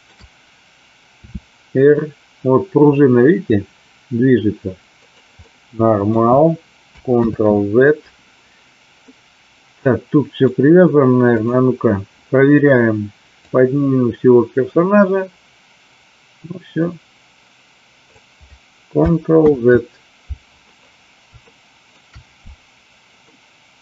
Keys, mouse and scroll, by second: 1.2 r, 4.9 click, 5.4-6.0 middle drag, 7.3 ctrl+z, 9.1-10.4 middle drag, 13.4-18.0 drag, 19.5 ctrl+z, 21.4 shift+middle click, 23.3-23.8 middle drag.